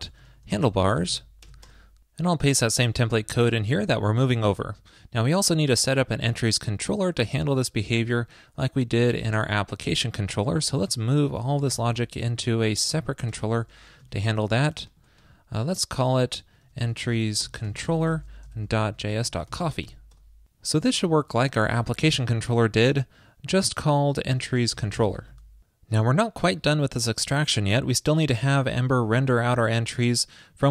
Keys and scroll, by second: 0.0 shift+super+Right, 3.2 super+a, 3.9 super+[, 4.4 super+s, 11.5 super+a, 11.7 super+c, 14.2 super+s, 18.7 shift+super+Right, 21.7 super+v, 25.3 super+s.